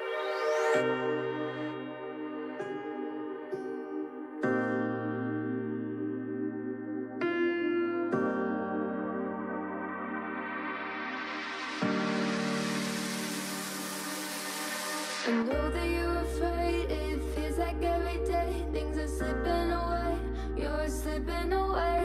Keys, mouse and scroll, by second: 0.9 x, 2.4 m, 3.6 click, 4.0 click, 4.6 g, 5.5 KP_1, 5.7 scroll down 2, 6.0 g, 7.3 scroll up 2, 7.4 shift+middle click, 7.8 1, 8.0 click, 8.8 g, 9.8-10.5 scroll down 2, 10.5 ctrl+l, 10.8 KP_3, 11.7-12.4 shift+middle drag, 12.4 g, 14.4 alt+z, 14.6-15.8 shift+middle drag, 17.6 shift+middle click, 17.8-18.3 scroll up 4, 18.3 alt+z, 18.6-19.1 shift+middle drag, 19.1 click, 19.6 ctrl+KP_Add, 20.1 KP_3, 20.4 scroll down 2, 20.6 shift+middle click, 20.8 g, 21.8 alt+z, 21.9 middle drag.